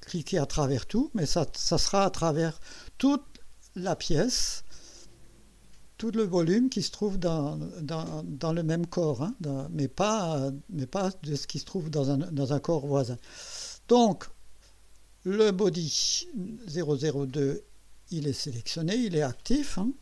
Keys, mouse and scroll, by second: 14.0 click, 17.5 click, 19.9 click.